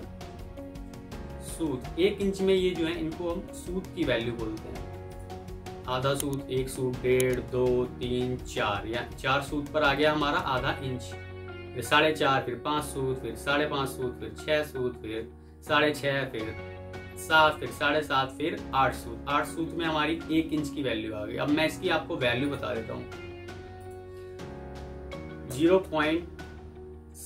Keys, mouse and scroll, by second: 0.5-1.2 typing, 20.6-21.1 alt+scroll down 1, 25.4 typing, 27.0-27.2 typing.